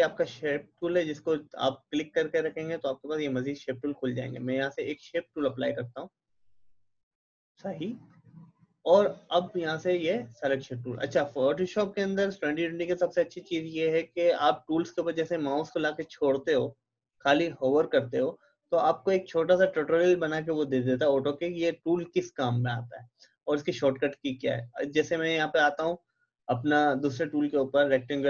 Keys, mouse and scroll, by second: 0.3-3.1 drag, 4.3-9.0 drag.